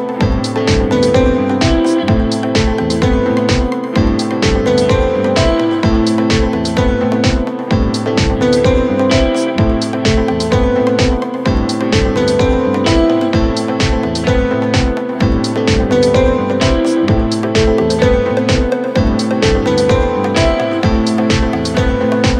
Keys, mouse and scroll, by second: 0.6 space, 0.8 right click, 2.4 double click, 2.5 double click, 2.6 right click, 3.4 scroll up 1, 3.5 middle click, 4.0 scroll up 1, 4.6 typing, 4.7 middle click, 6.4 scroll down 9, 6.6 middle click, 7.1 scroll up 10, 7.7-8.2 scroll up 5, 8.3-11.5 typing, 11.7 scroll down 6, 12.0 middle click, 12.4 scroll up 8, 12.5 space, 13.3 right click, 14.0 double click, 14.2 double click, 14.6 typing, 15.8 typing, 16.9-17.9 typing, 18.2 Return, 18.4 middle click, 18.8 middle click, 19.4 typing.